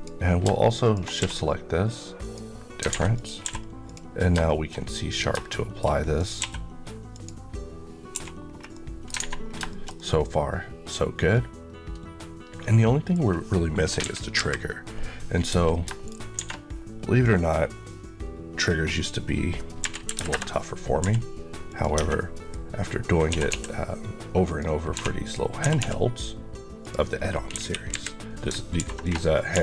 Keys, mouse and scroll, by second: 1.0 q, 2.1 click, 3.0 click, 3.3 q, 3.7 click, 4.3 shift+middle click, 6.0 click, 6.3 q, 6.9 click, 7.6 click, 8.0 1, 8.3-8.6 scroll down 1, 8.6 middle click, 9.0 alt+a, 9.3 scroll down 1, 9.5 shift+middle click, 13.8 KP_1, 15.9 shift+right click, 16.2 shift+a, 17.1 click, 19.1 scroll, 19.1-19.6 scroll up 1, 19.6 r, 19.9 KP_9, 20.1 KP_Enter, 20.9 g, 21.5 click, 21.8 Tab, 22.0 middle click, 23.1 typing, 24.3 click, 24.8-25.6 typing, 25.1 click, 26.7 click, 27.4 KP_1, 28.7 ctrl+r, 28.9 click, 29.4 g.